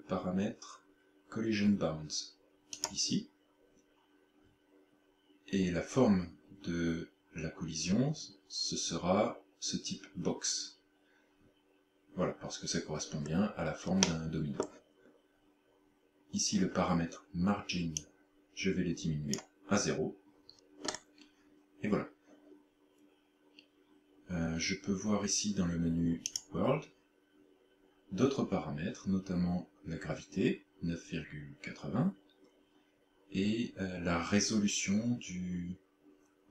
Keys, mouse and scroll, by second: 2.9 click, 13.1-14.0 scroll up 4, 14.0 middle click, 18.0 click, 20.9-22.5 scroll up 4, 26.3 click, 27.9-28.3 scroll down 3.